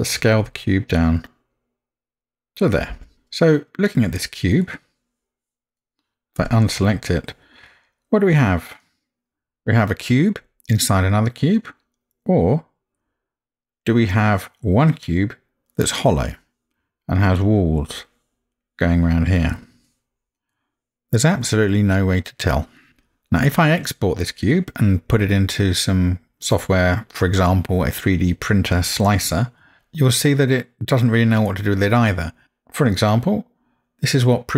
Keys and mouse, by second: 4.6-5.7 middle drag, 6.4 click, 7.1-14.1 middle drag, 14.9-15.7 middle drag, 20.5-22.4 middle drag, 23.4-33.8 middle drag, 33.8 click, 34.0-34.5 drag.